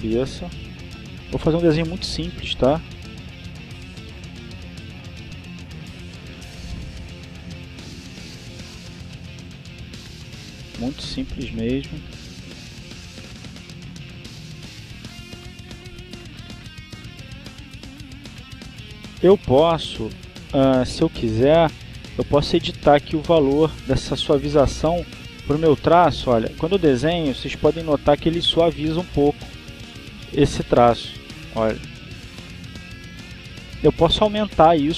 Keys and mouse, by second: 1.6 click, 2.6-4.0 drag, 4.3-5.3 drag, 5.8 click, 6.6-8.6 drag, 8.7-12.1 drag, 12.4 click, 13.8-14.9 drag, 15.3 click, 16.0-17.0 drag, 17.3-18.5 drag, 19.3-21.3 drag, 21.6-23.2 drag, 27.0-28.1 drag, 29.6 ctrl+z, 30.5-31.8 drag, 32.3 ctrl+z, 32.8-34.1 ctrl+drag, 34.6 ctrl+z.